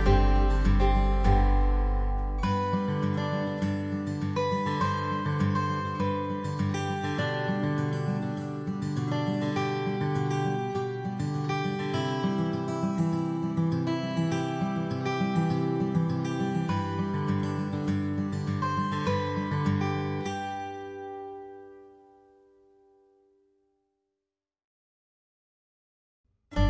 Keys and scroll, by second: 6.1 alt+space.